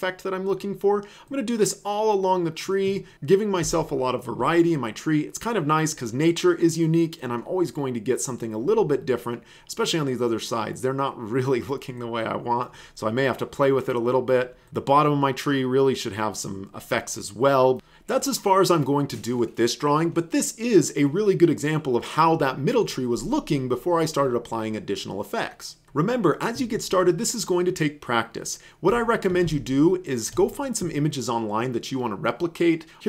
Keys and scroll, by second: 3.7 space, 29.4 alt+space.